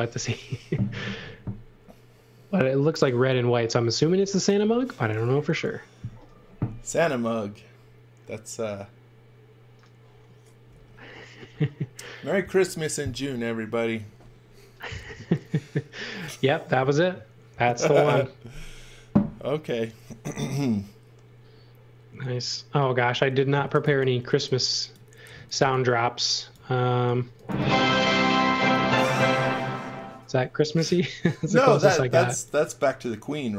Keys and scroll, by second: 22.9-25.6 typing, 26.9 x, 27.5 v, 32.1 space.